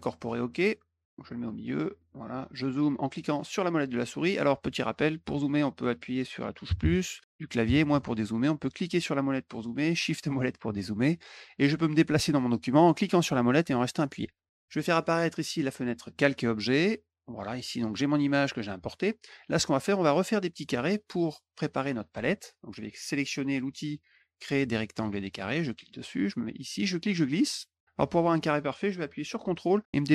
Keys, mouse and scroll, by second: 1.0 click, 1.7 middle click, 1.7-2.2 scroll up 3, 1.9 middle click, 2.1 middle click, 2.3 middle click, 3.2 middle click, 4.0 middle click, 8.7 middle click, 8.8 middle click, 9.9 shift+middle click, 10.1 shift+middle click, 12.8-14.2 middle drag, 14.9 click, 15.7 click, 17.1 click, 20.2 middle click, 20.3 scroll up 1, 20.9 middle click, 20.9 scroll up 1, 21.4 middle click, 25.4 click, 26.6-30.1 drag.